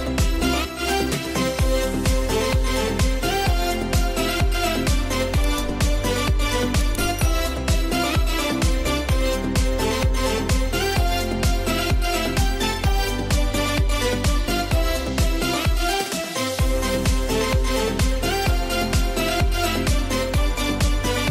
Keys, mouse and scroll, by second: 1.1 space, 1.3 click, 1.6 space, 3.4 ctrl+e, 4.8 ctrl+j, 6.0 scroll down 1, 6.5 scroll up 1, 7.6 click, 7.7 click, 15.4-21.3 drag.